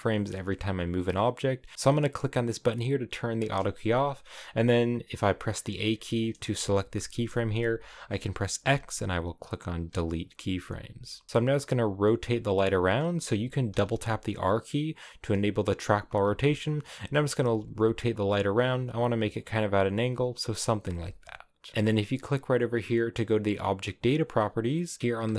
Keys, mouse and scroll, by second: 0.3 g, 1.7-5.1 drag, 5.1 a, 5.7 a, 6.1 right click, 6.5 g, 9.9 x, 11.0 r, 11.7 r, 13.6 r, 15.8 scroll up 2, 16.2 r, 16.6 scroll down 2, 16.9 r, 17.4 r, 18.0 r, 19.5 r, 20.1 scroll up 2, 20.8 r, 21.7 r.